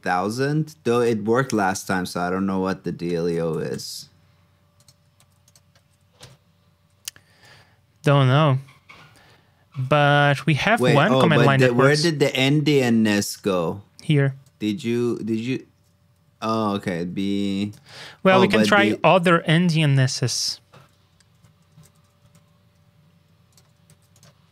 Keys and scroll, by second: 2.3 super+d, 5.1 super+c, 5.7 super+v, 10.5 super+c, 11.1 super+v, 16.2 super+x, 17.1 alt+Right, 17.9 super+v, 18.5 super+Tab, 20.7 super+Tab, 22.3 super+s, 23.8 super+c.